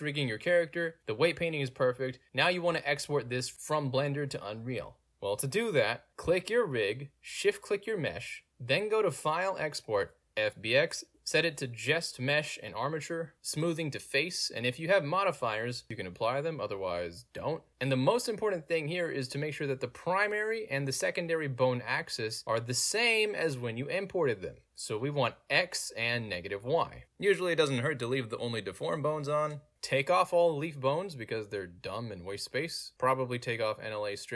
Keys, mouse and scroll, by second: 0.0 click, 4.9 click, 5.8 click, 6.7 shift+click, 8.4 click, 10.4 click, 11.5 click, 12.3 click, 12.7 click, 13.8 click, 14.0 click, 15.8 click, 18.1 middle click, 19.1 middle click, 20.3 click, 21.8 click, 22.9 click, 25.8 click, 28.6 click, 30.3 click, 33.2 click, 33.9 click.